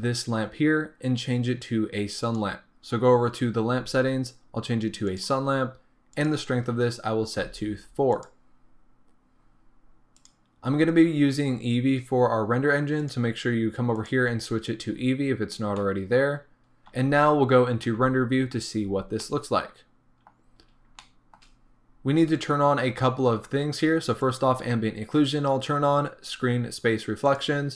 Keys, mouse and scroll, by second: 5.1-11.4 drag, 11.4-13.3 scroll up 1, 14.1-15.8 drag, 15.5 scroll down 1, 15.8-20.6 middle drag, 18.2 z, 18.8-19.2 scroll up 1, 20.6-21.1 scroll up 2, 21.1-24.3 shift+middle drag, 24.3 click, 26.3 click, 27.3-27.7 drag.